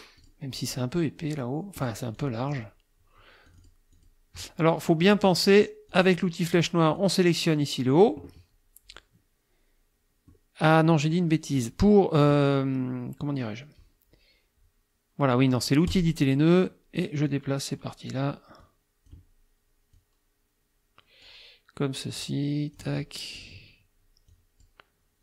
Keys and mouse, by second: 0.2 click, 1.8 click, 2.2 click, 3.5 click, 3.9 click, 5.9 click, 6.5 click, 7.0 click, 10.3-11.3 drag, 15.9 click, 17.3 click, 18.6 click, 19.9-21.5 drag, 22.2 click, 23.4 click, 24.3 click.